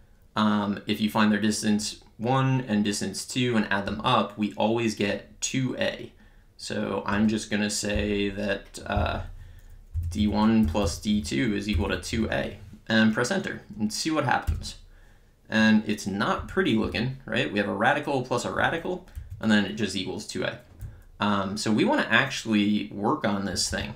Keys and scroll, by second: 8.0 Down, 9.8-12.7 typing, 14.4 Return, 16.4 Up, 19.2 Right, 20.8 Left.